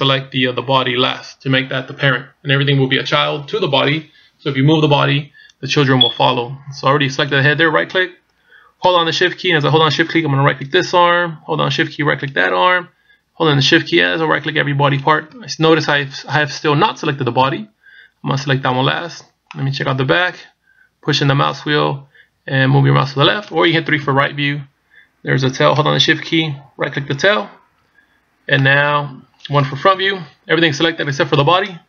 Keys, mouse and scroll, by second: 7.2 right click, 10.7 shift+right click, 12.4 shift+right click, 13.9 shift+right click, 15.2 shift+right click, 19.5 middle click, 24.0 KP_3, 27.2 shift+right click, 28.6 middle click, 30.0 KP_1.